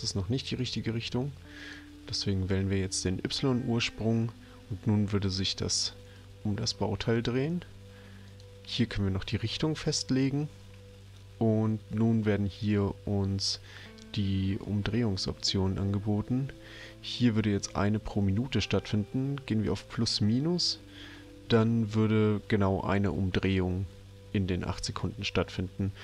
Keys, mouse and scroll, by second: 0.5 click, 1.6 click, 8.2 click, 20.0 click.